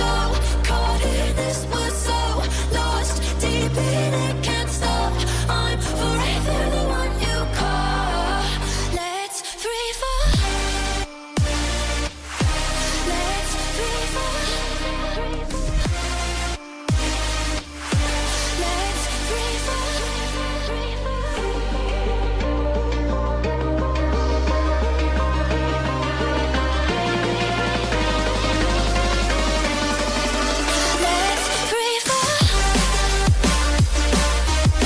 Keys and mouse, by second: 0.1 a, 0.4 i, 1.0-6.9 drag, 6.9 Left, 11.4 i, 11.7 space, 13.2 space, 14.2 space, 16.1 space, 17.2-23.2 drag, 17.2-24.5 right drag, 17.2 space, 18.7 space, 19.2 Right, 21.2 KP_0, 21.6 KP_0, 22.2 KP_3, 24.0 click, 24.5 middle click, 24.5-26.6 right drag, 25.1 g, 26.6 middle click, 26.7-34.8 right drag, 28.7 g, 31.1 r, 31.9 g.